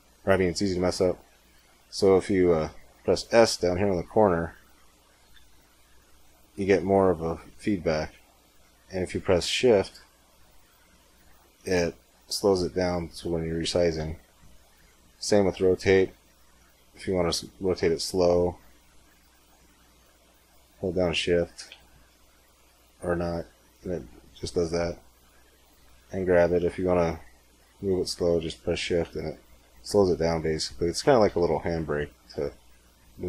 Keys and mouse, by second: 3.9 s, 15.1 r, 25.7 g.